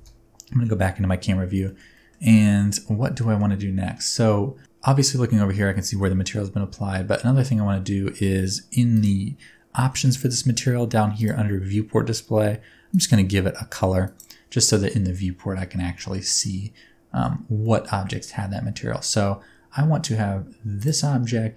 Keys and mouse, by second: 0.0 KP_0, 1.7 middle click, 2.0 middle click, 2.4 middle drag, 3.2 shift+middle drag, 3.4-4.3 drag, 3.4-4.6 middle drag, 3.4-4.3 right drag, 5.7 shift+middle click, 11.2 click, 14.7 middle click, 15.9 shift+middle drag, 16.5-17.2 middle drag, 17.6 middle click, 18.1 shift+middle click.